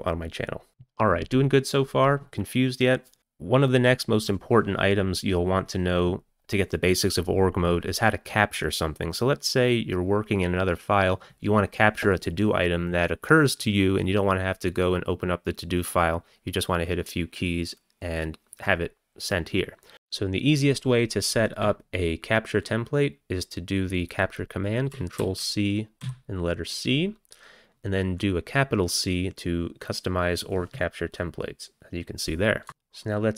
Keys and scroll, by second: 25.2 ctrl+c, 26.0 c, 32.7 c.